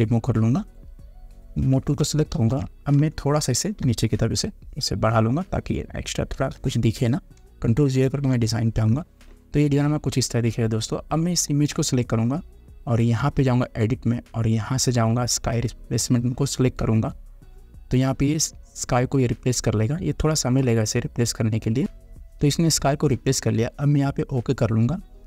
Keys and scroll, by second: 2.5 ctrl+t, 3.2 space, 6.6 Return, 8.2 ctrl+0.